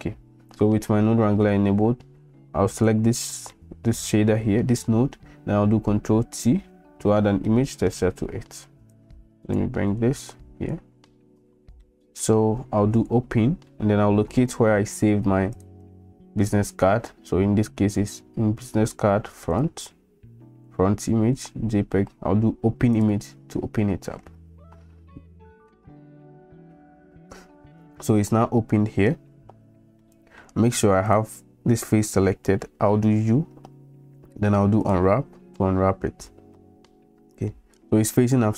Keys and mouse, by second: 2.8 click, 3.6 click, 6.3 ctrl+t, 7.5 middle click, 9.1-9.6 drag, 10.2 click, 11.9 click, 13.0 click, 30.0 middle click, 31.1 click, 33.0 u, 36.6 middle click.